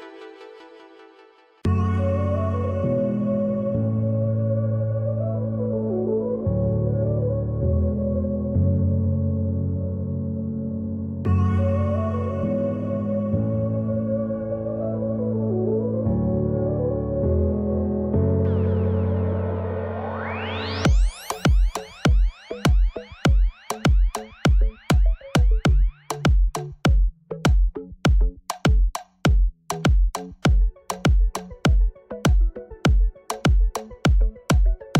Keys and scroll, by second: 10.2 z, 18.0 KP_1, 19.9 Tab, 20.5 l, 25.2 ctrl+z, 25.6 Escape, 26.3 Tab, 27.8 ctrl+s, 32.7 Tab, 33.4 p.